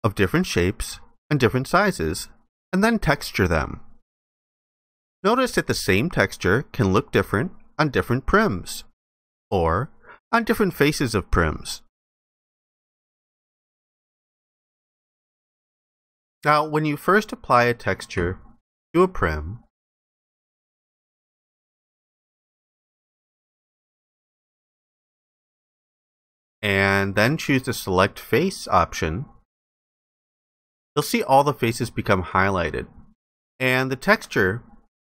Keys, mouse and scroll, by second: 25.8 ctrl+alt+click, 31.2 ctrl+alt+click.